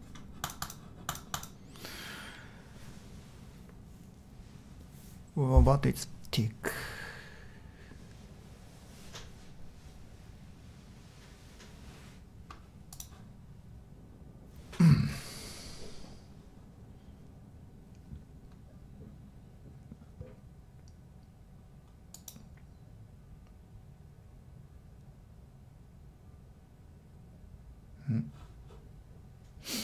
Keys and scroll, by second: 0.0-0.1 typing.